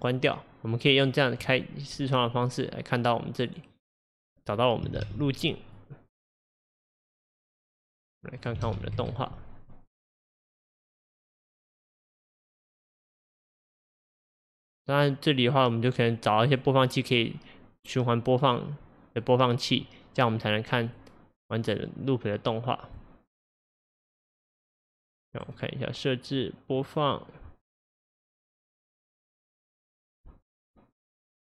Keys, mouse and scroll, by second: 1.5-6.7 drag, 7.4-31.5 drag.